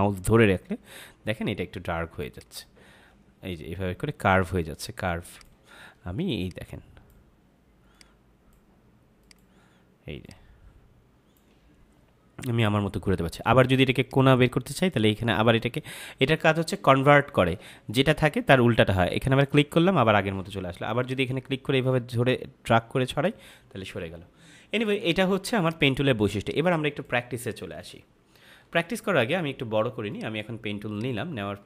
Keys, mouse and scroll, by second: 13.9 click, 19.2 click, 27.7 Delete, 30.0 click.